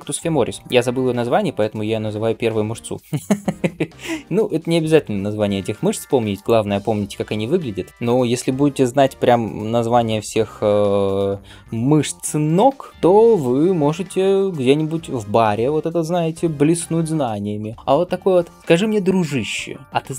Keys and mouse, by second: 6.3-18.6 ctrl+middle drag, 19.8 middle click.